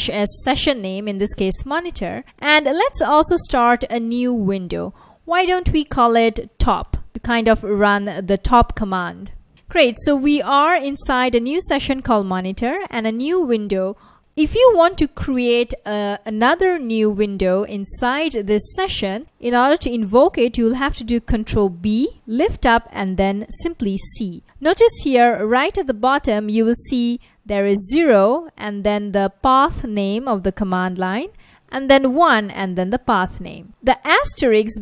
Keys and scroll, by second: 2.2-4.1 typing, 6.6-8.0 typing, 11.8 F1, 21.8 ctrl+b, 25.6 F1, 28.1 F1, 29.6 F1, 31.7 F1, 34.4 F1.